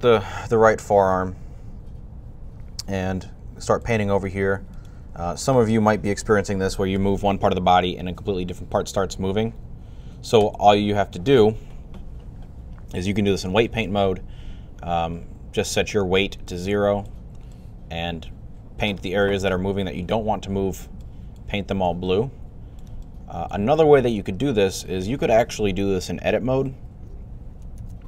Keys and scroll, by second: 6.8 r.